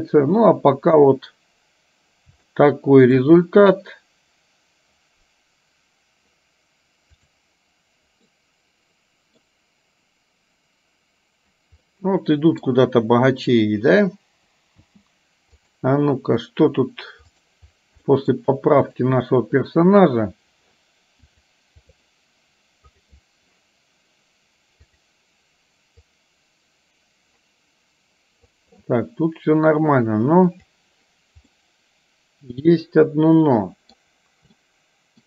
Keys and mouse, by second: 2.6 shift+middle click, 8.4-9.9 middle drag, 12.0 middle click, 14.9 space, 15.7 click, 17.4 click, 18.1 middle click, 18.9 click, 21.2 click, 23.1 click, 26.4-28.5 drag, 30.6 click, 31.6-34.0 middle drag, 34.6 middle click.